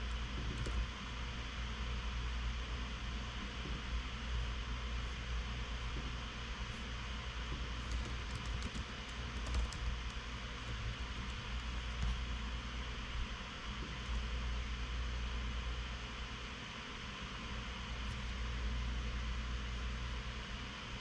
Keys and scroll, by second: 0.3 super+c, 1.2 super+v, 8.1-12.2 typing.